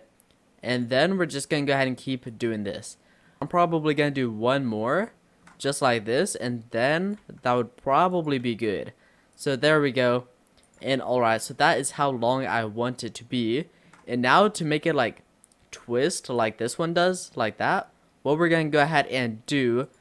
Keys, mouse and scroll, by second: 1.1 s, 2.8-3.3 scroll down 4, 3.3 shift+middle click, 3.4-4.0 scroll down 1, 4.1-5.1 scroll up 9, 5.1 shift+middle click, 5.7 e, 7.3 s, 8.5 e, 9.6 s, 10.9 Tab, 11.1-11.9 scroll down 8, 11.5 middle click, 11.9-14.3 middle drag, 14.3-14.7 scroll up 3, 16.4 click, 16.9-18.9 middle drag, 18.9 click, 19.9 click.